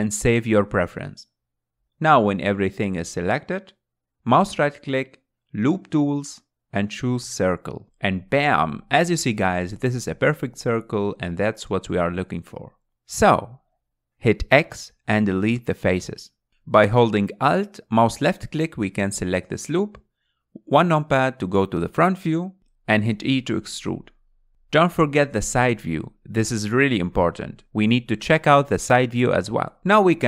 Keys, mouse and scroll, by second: 4.3-6.9 right drag, 8.5 scroll down 2, 8.8-10.8 middle drag, 10.8 KP_Decimal, 11.5 scroll down 3, 11.8-13.2 middle drag, 13.2 x, 15.3-17.2 middle drag, 17.2 alt+click, 18.3 KP_1, 19.2-19.7 scroll down 4, 20.9 e, 22.9 r, 24.4 s, 27.7-29.5 shift+middle drag, 29.5 click.